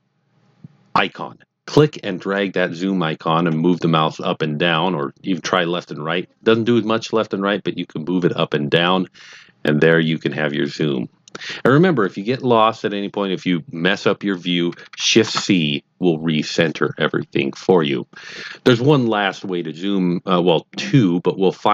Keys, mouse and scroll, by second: 2.3 click, 15.2 shift+c.